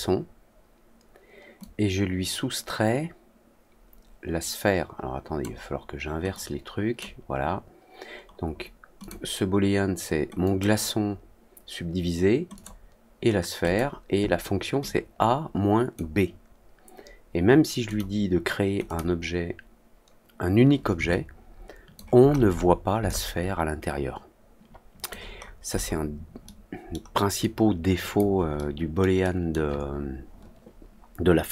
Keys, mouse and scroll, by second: 1.5-5.3 drag, 6.2 click, 8.9 click, 10.4 click, 12.5 click, 13.6 click, 14.8-15.9 drag, 17.8 click, 18.8 click, 21.0-21.9 alt+drag, 22.2 alt+middle click, 22.5 middle click, 23.0-25.0 alt+drag, 25.3 alt+middle click, 25.7 alt+middle click, 26.4-26.8 alt+middle drag, 27.3-28.1 alt+drag, 28.5-28.9 alt+middle drag, 29.1-29.4 alt+middle drag.